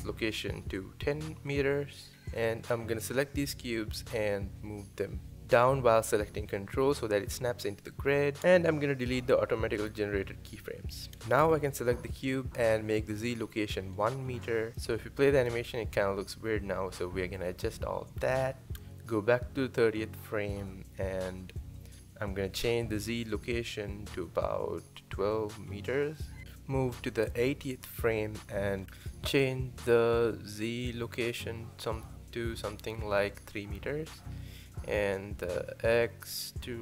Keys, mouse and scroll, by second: 2.8 click, 3.9 g, 9.8 x, 11.3 click, 13.8 click, 14.8 space, 17.5 space, 19.5-26.4 drag, 27.4-36.8 drag.